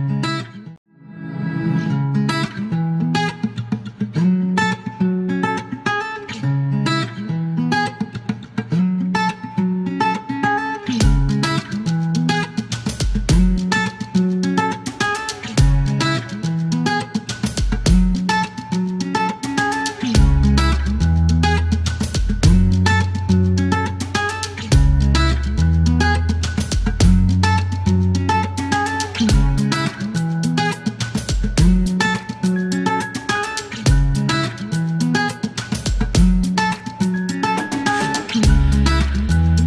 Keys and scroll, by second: 0.0-0.8 typing, 3.2 typing, 4.6 space, 8.0 typing, 10.4 space, 11.0 F1, 11.5 ctrl+a, 11.5 typing, 14.8 ctrl+a, 14.9 ctrl+d, 16.6 KP_6, 17.1 space, 17.4 ctrl+a, 17.5 ctrl+z, 17.8 ctrl+e, 25.8 space, 27.0 alt+t, 28.4 space, 28.8 t, 30.4-31.1 typing, 33.0 e, 33.6 Delete, 36.6 Delete, 38.9 typing.